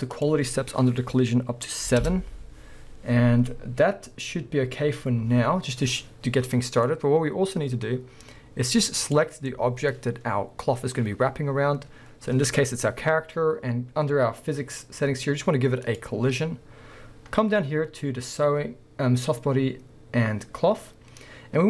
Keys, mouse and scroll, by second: 0.1-6.8 drag, 2.0 7, 4.2-6.8 scroll up 1, 6.8-9.0 middle drag, 9.0 click, 9.5-13.5 middle drag, 15.9-21.6 drag.